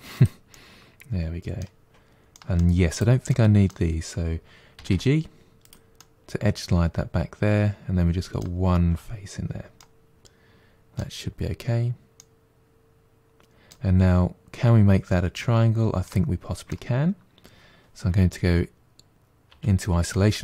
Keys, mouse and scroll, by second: 0.3-1.8 middle drag, 1.8-2.2 scroll up 1, 2.2 middle click, 2.8 click, 3.1-4.6 middle drag, 4.6 g, 5.8-8.8 middle drag, 9.6-11.6 middle drag, 11.6-12.0 scroll down 2, 12.0-15.1 middle drag, 15.9-18.9 middle drag, 19.3 KP_Divide, 20.0-20.4 middle drag.